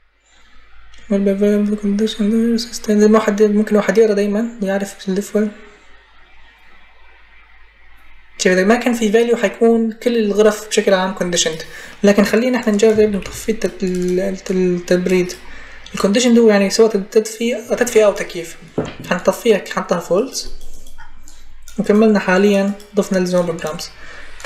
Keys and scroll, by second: 12.8 ctrl+c, 13.0 ctrl+v.